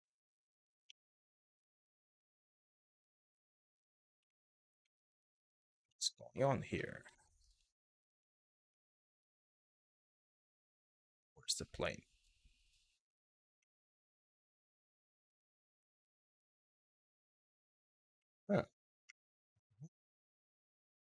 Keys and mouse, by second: 2.7 Tab, 4.0 middle click, 4.6-5.0 middle drag, 5.6 shift+middle drag, 6.4-6.7 middle drag, 6.9 shift+middle drag, 7.9 shift+middle click, 8.4 middle click, 8.8 shift+middle drag, 12.6 click, 13.3 middle click, 15.0 click, 15.7 middle click, 17.9 middle click, 18.7 KP_1, 20.0 middle click.